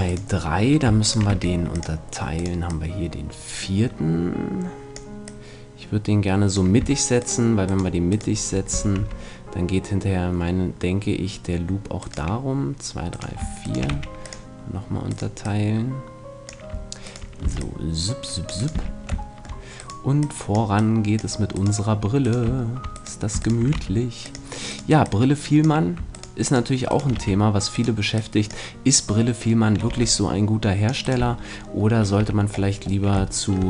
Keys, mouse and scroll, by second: 1.1-4.5 right drag, 1.3 w, 2.6-4.5 drag, 5.2-6.8 drag, 7.2-10.2 shift+right drag, 8.7 shift+f, 9.0 a, 12.0-16.6 right drag, 13.9 w, 15.4-16.6 drag, 17.3-20.2 right drag, 17.4 c, 18.7 f, 22.5-29.8 right drag, 23.7 w, 25.0-26.9 drag, 27.2 f, 28.2-29.6 drag, 29.8 click, 29.8 c, 31.2 right click, 31.2 f, 31.4-33.0 middle drag, 32.2 a.